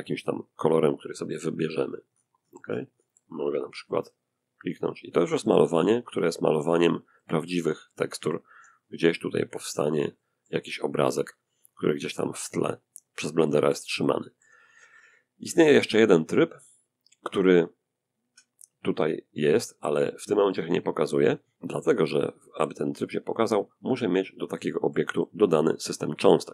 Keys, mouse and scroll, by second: 0.3-1.0 drag, 1.1-2.6 scroll down 1, 2.6 scroll up 1, 2.7 click, 3.3-4.7 scroll up 1, 4.7-8.0 drag, 4.7-8.0 middle drag, 7.8 f, 8.0 scroll up 1, 8.1-10.7 drag, 9.4-10.7 middle drag, 10.9-11.8 drag, 12.3-12.7 scroll down 1, 12.7-15.3 shift+drag, 15.6 click, 22.3 click, 22.8 scroll up 1, 22.9 click, 23.4 middle click, 23.4-23.8 scroll down 1, 23.8-25.3 drag, 25.7-26.1 scroll down 1.